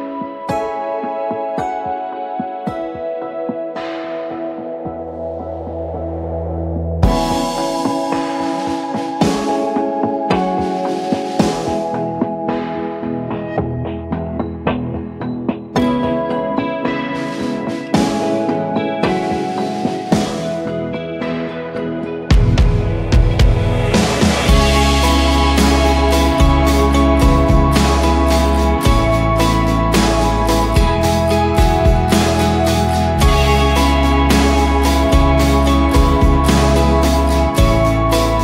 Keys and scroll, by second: 0.1-4.4 typing, 5.2 ctrl+t, 6.3-8.7 typing, 9.1 ctrl+a, 10.2 ctrl+d, 15.2-17.7 typing, 23.9-26.1 typing, 27.2 Return, 29.6-34.2 typing, 36.0 ctrl+s, 36.3 ctrl+w.